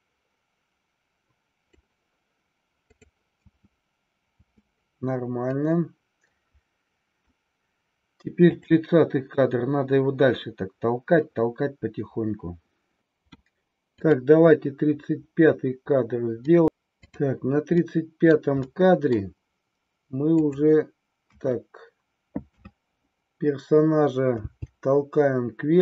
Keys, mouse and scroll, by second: 3.4 space, 5.5-7.1 middle drag, 8.5 click, 14.0 click, 16.3 middle click, 16.9 click, 17.9 middle click, 18.7-19.2 middle drag, 21.4 KP_1, 22.5 KP_3, 24.4 g.